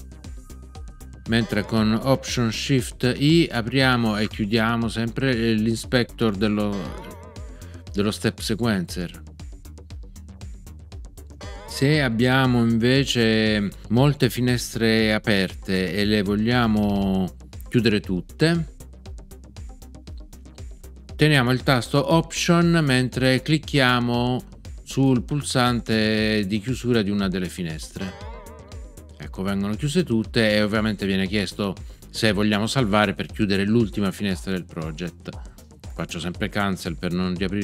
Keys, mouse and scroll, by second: 1.3 alt+shift+b, 6.7 alt+shift+i, 11.3 alt+shift+i, 27.9 alt+click.